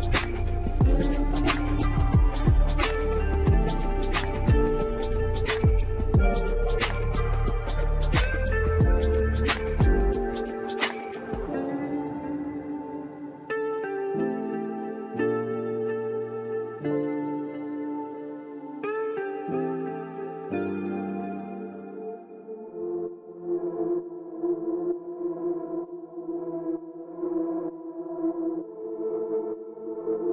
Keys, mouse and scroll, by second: 0.4-3.0 middle drag, 3.0 KP_0, 7.2 click, 7.9 click, 8.3 click, 9.4 click, 10.0 click, 12.8 click, 14.6 click, 15.3-16.6 scroll up 1, 16.6 click, 17.2-18.4 middle drag, 18.4-19.0 scroll up 3, 19.0-19.6 shift+middle drag, 19.6-20.7 scroll down 3, 22.1 click, 23.8-25.3 middle drag, 25.3 click, 28.1 click, 28.5 click.